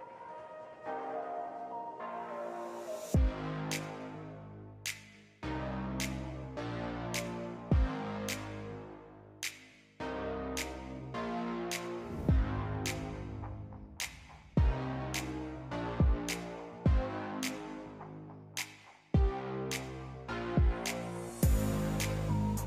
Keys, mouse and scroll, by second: 4.3 click, 6.6 click, 8.0 click, 9.3 click, 9.8 click, 11.0 click, 11.9 click, 12.3 click, 12.8 click, 14.1 click, 15.7 click, 16.0 click, 21.6 click, 22.5-22.6 drag.